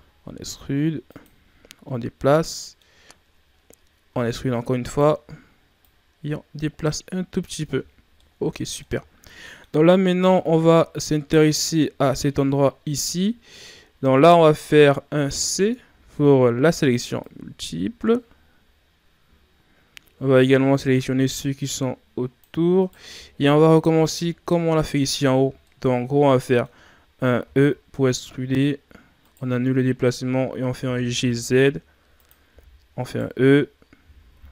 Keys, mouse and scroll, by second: 1.9 scroll down 2, 2.1 middle click, 3.0-4.0 scroll up 2, 4.1 e, 5.8-7.6 drag, 7.6 Tab, 7.8-8.1 scroll down 2, 8.1-9.0 middle drag, 9.0-9.4 scroll down 3, 9.4 middle click, 9.7-10.2 scroll up 1, 10.2 Tab, 10.7-13.6 scroll up 1, 14.1 right click, 15.9 c, 23.0 scroll up 1, 23.1 middle click, 23.6-24.1 ctrl+scroll up 2, 24.1-25.3 middle drag, 25.3 scroll down 2, 25.5 middle click, 26.0-26.4 scroll up 1, 26.4-27.4 middle drag, 27.4 e, 30.7 g, 32.5 e, 34.0 g.